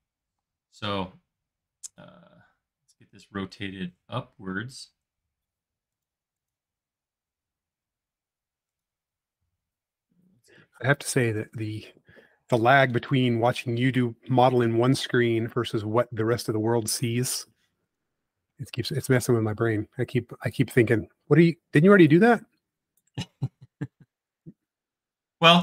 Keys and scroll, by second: 0.4 m, 2.5 q, 4.0 Left, 4.7 Left, 5.3 Left, 5.6 Right, 14.6 m, 25.1 space.